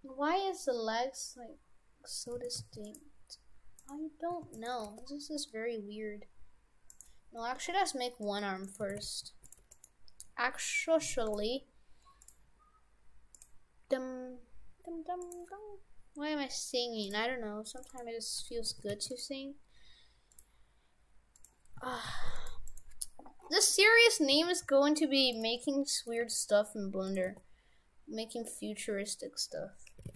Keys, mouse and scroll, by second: 2.4 shift+f, 3.8 right click, 4.4 shift+d, 4.8 g, 7.6 Delete, 8.7 right click, 8.9 shift+f, 9.6 Tab, 9.8 right click, 11.3 click, 12.3 click, 15.2 click, 18.8 shift+f, 20.4 click, 21.9 shift+f, 22.7 right click, 23.6-24.4 scroll down 6, 24.4 a, 24.6 g, 25.6 middle click, 26.2 g, 27.3 r.